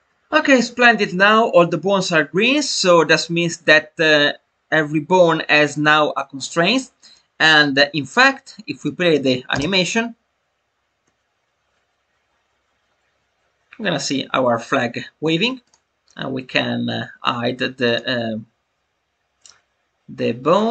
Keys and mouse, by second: 7.0 middle click, 15.6 click, 17.8 click, 20.5 click.